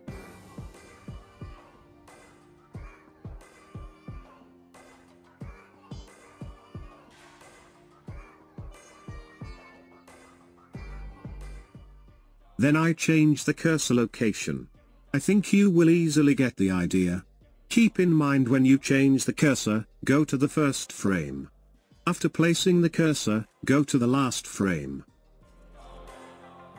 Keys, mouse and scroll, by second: 0.4 space, 2.4-5.5 drag, 5.7 click, 8.4-25.6 drag, 26.6 click.